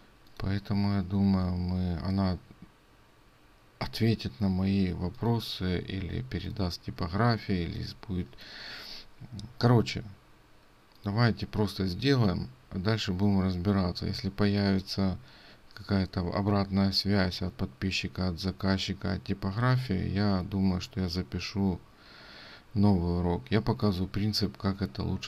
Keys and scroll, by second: 6.2 ctrl+space.